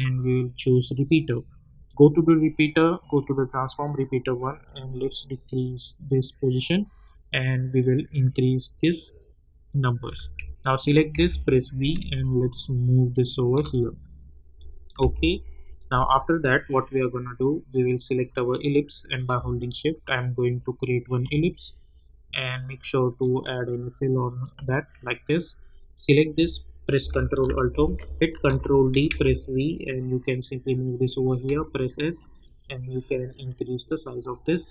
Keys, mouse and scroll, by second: 4.6-6.2 drag, 11.1 v, 11.8-14.6 drag, 15.0 u, 15.7-24.4 drag, 27.3 ctrl+alt+Home, 28.4 ctrl+d, 29.0 v, 29.7-31.4 drag, 31.4 s, 32.1-34.7 drag.